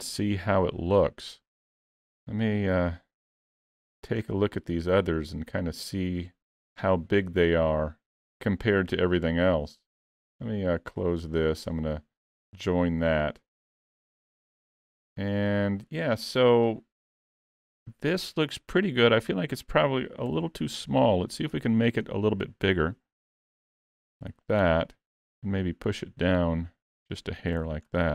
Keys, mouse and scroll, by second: 2.1 scroll down 1, 3.3 middle click, 3.3-4.2 scroll down 11, 4.2-4.8 scroll down 2, 5.2 middle click, 5.2 scroll down 1, 10.4 right click, 14.4 click, 15.8-16.4 scroll up 2, 16.4 middle click, 19.4 click, 20.3 KP_Decimal, 21.2 middle click, 21.5-22.4 scroll down 1, 22.4 scroll down 2, 22.7 s, 25.3 click, 27.6 alt+a, 27.9-28.1 scroll down 6.